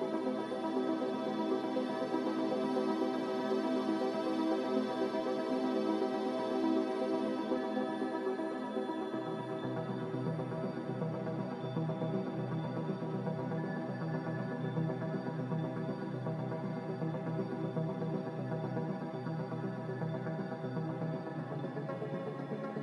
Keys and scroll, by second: 4.0 a, 6.2 a, 9.9 ctrl+c, 13.2 a, 14.3 typing, 15.2 Return, 16.8-18.3 typing.